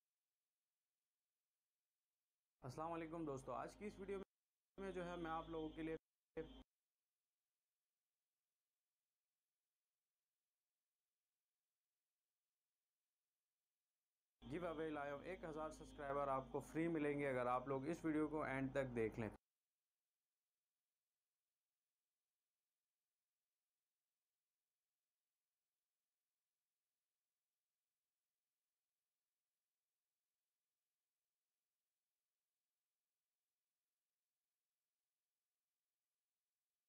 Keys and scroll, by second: 2.6 space, 4.2 space, 7.8 c, 11.7 v, 13.5 shift+Delete, 14.4 space, 19.3 space.